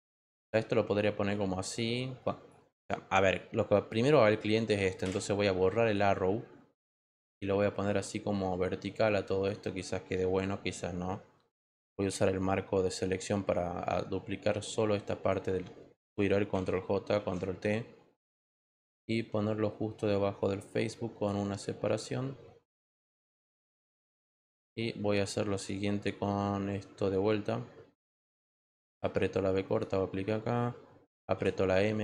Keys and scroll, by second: 11.9 m, 16.5 ctrl+j, 17.1 ctrl+t, 24.1 Return, 31.3 m.